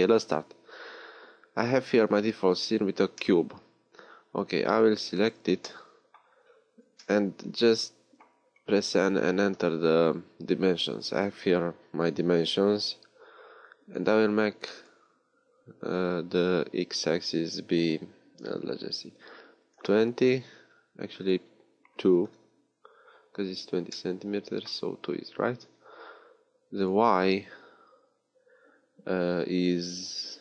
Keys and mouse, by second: 5.1-7.0 middle drag, 8.8 n, 23.0 middle click.